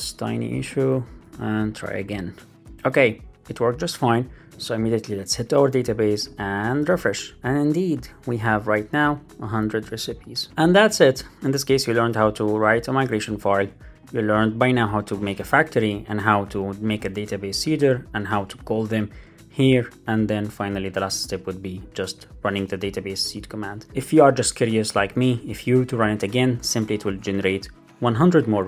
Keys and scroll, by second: 0.8 super+v, 1.1 super+s, 2.5 Up, 2.6 Return, 6.6 super+r, 22.8 Up, 27.0 Return.